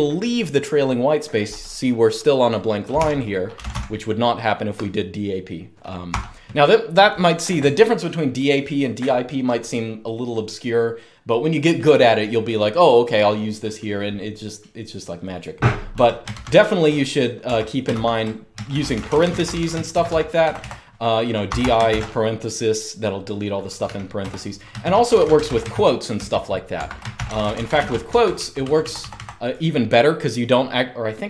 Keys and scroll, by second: 2.7-3.9 typing, 5.8 typing, 15.6-16.0 typing, 17.3 Escape, 17.6-21.6 typing, 23.5-29.2 typing.